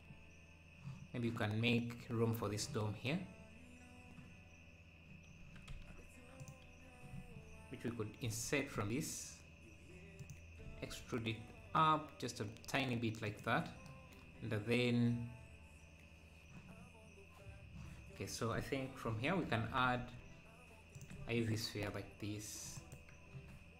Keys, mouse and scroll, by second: 0.0-0.7 scroll up 2, 4.0-4.9 scroll up 2, 5.4 Tab, 6.4-8.2 drag, 8.2 i, 10.7 e, 19.0 shift+s, 19.4 Tab, 19.9 shift+a, 21.7 s, 23.3 KP_1.